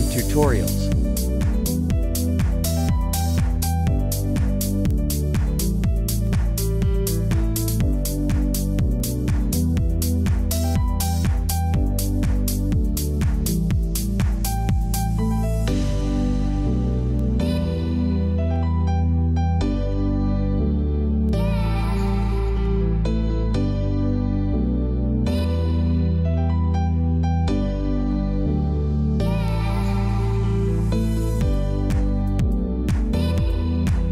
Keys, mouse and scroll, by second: 2.5 click, 4.2 click, 6.0-12.2 typing, 6.3 click, 7.5 click, 8.5 click, 9.3 click, 9.7 click, 10.9 click, 11.9 click, 12.1 click, 12.3 click, 13.5-15.0 typing, 13.7 click, 13.9 click, 14.2 click, 15.4 click, 16.0-20.3 typing, 16.1 click, 17.9 click, 19.2 click, 19.9 click, 20.7 click, 21.6-24.1 typing, 21.9 click, 22.5 click, 23.0 click, 23.7 click, 24.1 click, 24.9 click, 25.6 [, 26.3 click, 26.6 z, 26.7 click, 32.2 ctrl+e, 33.0 ctrl+j, 33.5 ctrl+click, 33.9 ctrl+shift+a.